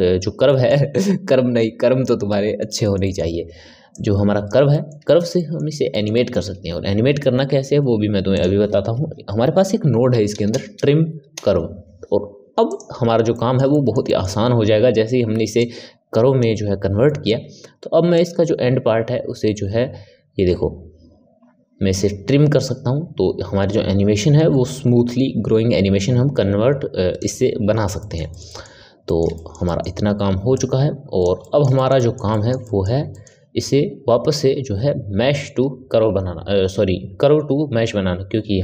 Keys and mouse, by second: 3.9 click, 4.6-7.5 middle drag, 7.5 shift+a, 13.2-15.5 middle drag, 15.5 click, 17.0-18.0 middle drag, 18.0-21.2 drag, 27.9-30.4 ctrl+middle drag, 30.4 click, 31.3-38.6 middle drag.